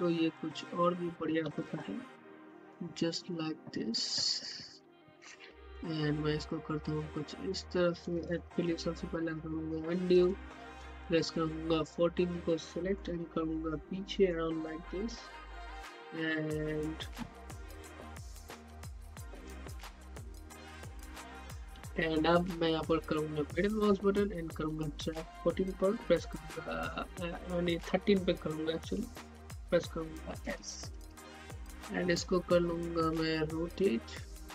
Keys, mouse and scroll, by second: 1.9-5.0 typing, 6.5-8.6 drag, 8.6 z, 10.5 shift+click, 12.9-15.8 middle drag, 15.8 click, 23.6-30.4 middle drag, 30.4-30.9 typing, 32.8-34.5 drag.